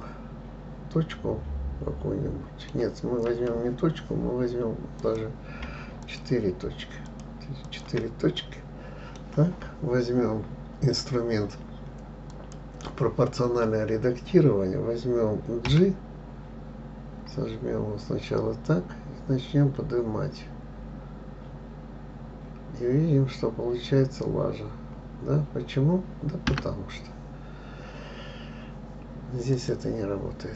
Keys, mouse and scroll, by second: 5.4 click, 6.4 shift+click, 7.4 shift+click, 8.0 shift+click, 8.8-11.8 middle drag, 12.7 click, 16.0 g, 29.9 click.